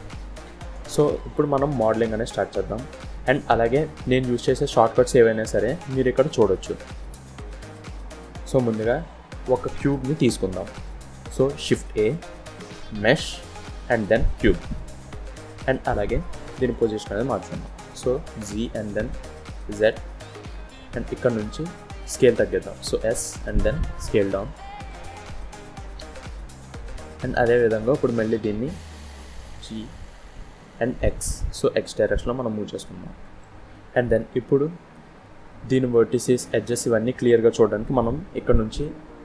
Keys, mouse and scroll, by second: 2.7 scroll down 1, 2.8 scroll up 2, 3.4 scroll down 1, 4.0-4.4 scroll down 1, 4.7-5.1 scroll up 1, 7.3-7.9 scroll down 1, 11.7 shift+a, 17.0 g, 20.3-20.8 scroll up 3, 21.6 s, 25.2-25.6 scroll up 4, 25.8 shift+middle click, 26.6 scroll up 2, 27.0 shift+middle click, 29.2 g, 33.8-34.2 scroll down 2, 34.2 scroll up 1.